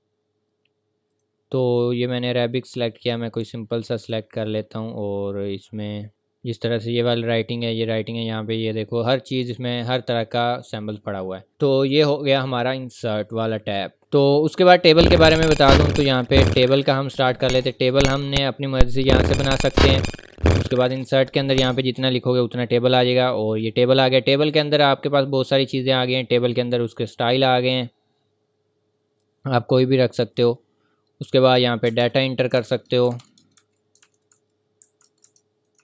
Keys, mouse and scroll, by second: 3.0 scroll up 1, 4.0 click, 5.4-5.9 scroll down 1, 5.9 scroll up 1, 6.1 click, 14.0 click, 15.5 click, 16.4 Return, 17.6 click, 20.8 click, 26.8 click, 30.3 click, 31.6-35.8 typing, 32.4 click, 32.9 click, 33.4 click, 34.2 click, 35.6 click.